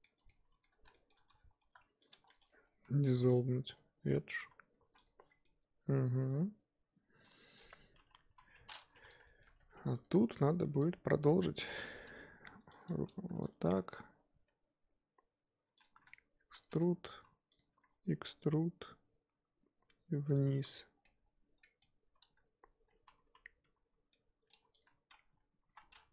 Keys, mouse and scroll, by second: 0.2 scroll down 1, 0.3-1.6 middle drag, 1.6 1, 2.1 click, 2.3 2, 2.5 click, 3.8 x, 4.1 scroll down 1, 4.4 1, 4.8 3, 5.0 click, 5.2 scroll down 3, 5.5-8.2 middle drag, 8.2 KP_1, 9.0 z, 9.2 shift+middle click, 9.4-9.7 scroll up 3, 9.7 Tab, 10.0 click, 11.2 click, 11.7 click, 12.0 Tab, 12.8 click, 13.3 shift+d, 13.6 s, 16.0 e, 16.7 s, 17.7 e, 20.6 z, 21.0 scroll down 1, 21.0-23.2 middle drag, 23.2 l, 23.6 l, 24.1 middle click, 24.7 click, 25.7 l, 25.9 scroll up 2.